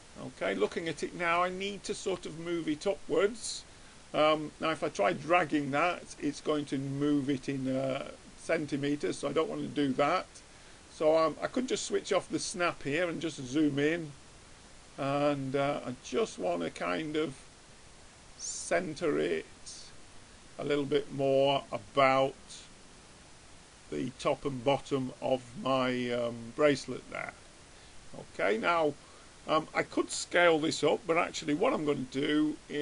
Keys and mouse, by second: 7.4-9.2 drag, 11.7-13.5 drag, 13.5-14.5 middle drag, 15.4-16.5 drag, 20.9-23.1 middle drag, 25.4-27.3 middle drag.